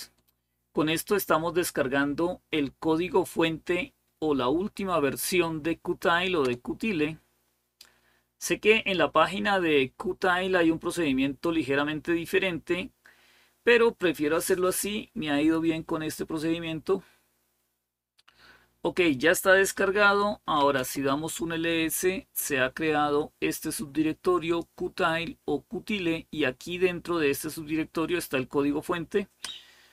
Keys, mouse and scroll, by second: 16.7-17.7 scroll down 1, 20.0-20.9 typing, 23.3-24.5 drag.